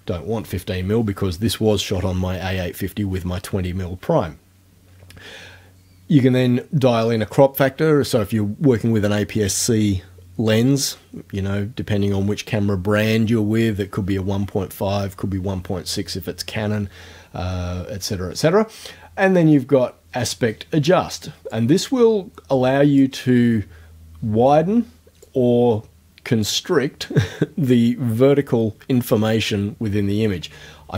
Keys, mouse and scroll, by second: 21.5-23.2 drag, 25.3-26.7 drag.